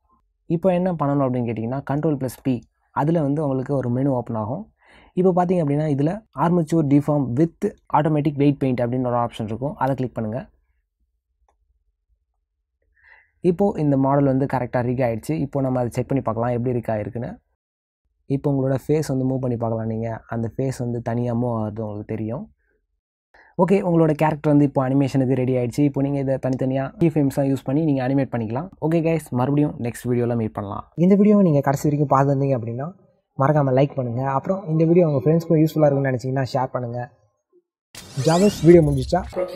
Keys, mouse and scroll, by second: 6.5 ctrl+p, 11.8 middle click, 13.5 middle click, 15.2 ctrl+middle click, 16.6 click, 17.7 click, 18.4 click, 20.5 click, 23.0 ctrl+middle click, 24.1 r.